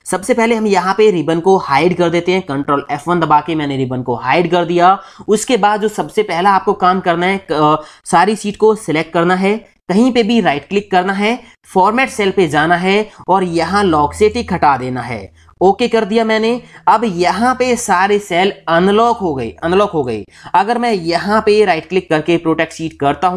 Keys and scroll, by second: 2.6 ctrl+F1.